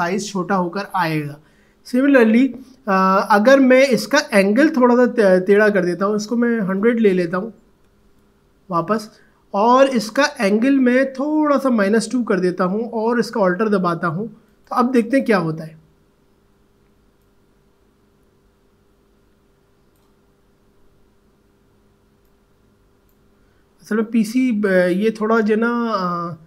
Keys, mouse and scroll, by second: 2.2 ctrl+z, 6.6 click, 7.2-8.3 typing, 10.4-14.5 drag, 17.2-26.4 drag.